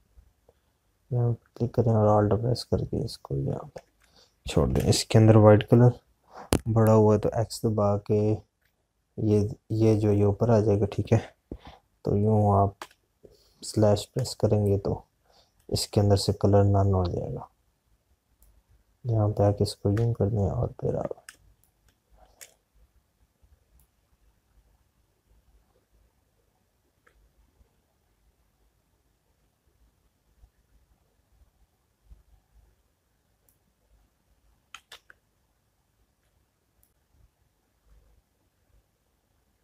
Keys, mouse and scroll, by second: 5.3 space, 9.9 x, 17.8 space, 24.5 space, 25.1-34.3 drag, 34.3 click, 36.1 ctrl+z, 38.5-39.6 alt+drag.